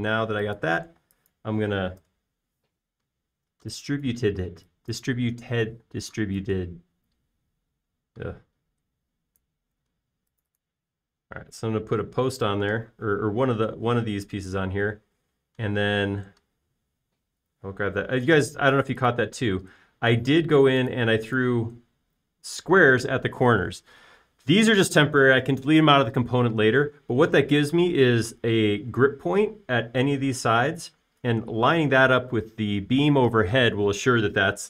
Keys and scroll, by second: 2.2-3.8 typing, 6.7 p, 12.1 space, 20.8 space, 29.0-29.5 typing.